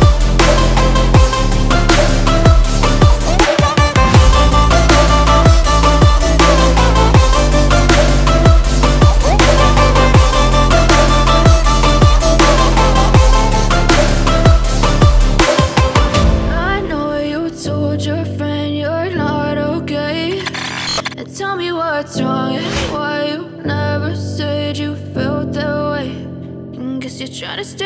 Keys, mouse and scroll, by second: 3.8 scroll down 1, 6.7 scroll down 1, 8.8 scroll down 1, 11.0 click, 12.3 click, 16.7 F4, 18.5 F9, 20.1 click, 21.7 ctrl+o, 23.2 scroll down 1, 25.7 scroll down 1, 27.6 click.